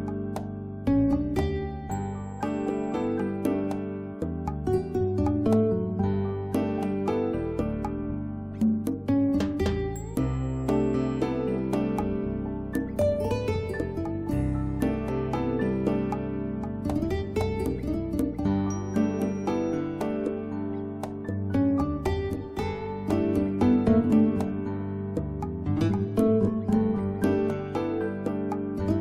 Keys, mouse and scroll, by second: 0.1 click, 1.2 scroll down 1, 1.4-3.3 scroll up 1, 5.2 click, 6.7 right click, 6.9 click, 13.9 click, 17.0 click, 18.0 right click, 18.3 click, 19.8 right click, 20.3 click, 27.1 click.